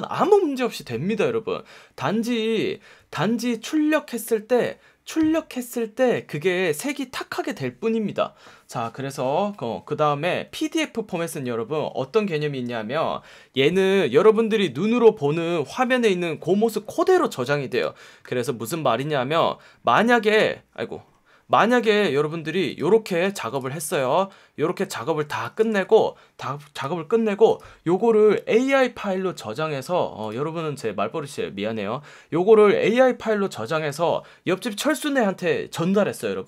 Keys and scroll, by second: 23.2 v, 25.2 space, 25.7 v.